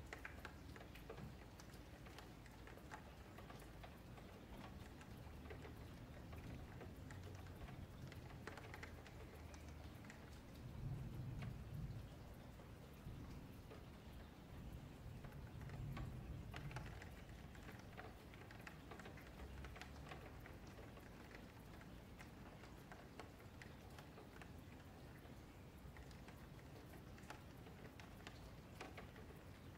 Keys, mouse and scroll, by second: 1.0 2, 1.3 alt+click, 2.5 shift+middle click, 2.9 scroll up 2, 3.1 1, 3.6 click, 3.9 shift+click, 4.2 alt+shift+a, 5.6 ctrl+z, 5.8 ctrl+z, 8.4 shift+click, 9.0 click, 9.3 shift+click, 9.4 alt+shift+a, 10.2 shift+click, 10.5 alt+shift+a, 10.8 shift+middle click, 11.5 2, 11.6 click, 12.0-13.2 right drag, 13.2 1, 13.5 click, 14.1 shift+click, 14.5 shift+click, 14.8 alt+shift+a, 15.1-15.5 scroll down 1, 15.5 shift+middle click, 15.8-16.2 scroll down 2, 16.2-16.8 scroll up 1, 16.8 click, 17.2 shift+click, 17.4 alt+shift+a, 17.8 click, 18.1-18.9 scroll down 1, 18.9-20.6 shift+middle drag, 20.6-21.3 scroll up 2, 21.3-21.9 scroll down 1, 21.9 Tab, 22.1 scroll down 2, 22.3 middle click, 22.7 click, 23.0 Tab, 23.3 2, 24.0 click, 24.4 alt+click, 24.9-25.5 scroll up 2, 25.5 middle click, 26.0 g, 26.9 scroll down 1, 27.1 middle click, 28.0-28.3 scroll down 5, 28.3 middle click, 28.9 scroll down 1, 29.0-29.3 scroll up 4, 29.3-29.7 middle drag.